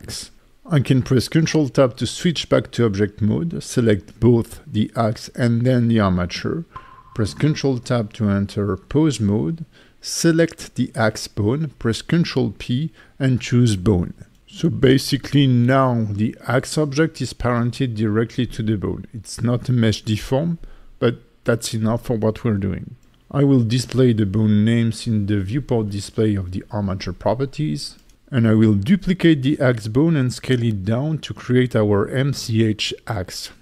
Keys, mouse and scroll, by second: 0.2 Tab, 0.8 click, 2.1 shift+click, 2.6 Tab, 3.0 click, 5.0 Tab, 7.7 ctrl+Tab, 8.4 click, 9.6 ctrl+p, 16.0 click, 16.6 g, 17.3 right click, 18.0 alt+middle click, 19.6 KP_1, 20.6 Tab, 23.3-24.5 scroll down 4, 24.5 click, 29.9 shift+d, 30.3 click, 30.7 s, 32.6 click, 33.3 F2.